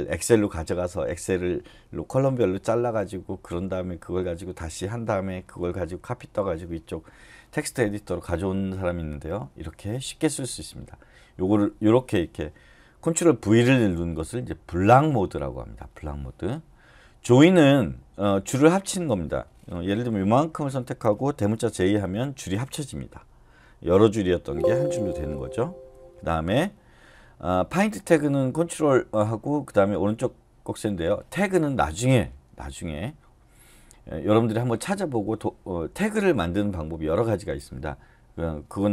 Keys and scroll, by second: 21.8 shift+j, 25.0 Escape, 25.8 u.